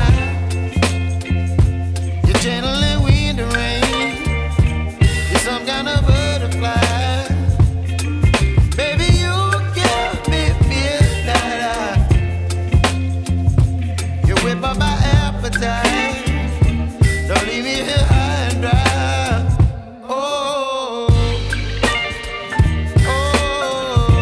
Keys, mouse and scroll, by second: 6.4 click, 15.2 z, 15.8 click, 15.9 space, 16.1 click, 16.5 space, 17.2 click, 17.8 space, 18.1 click, 18.4 space, 23.4 ctrl+space, 23.8 ctrl+j.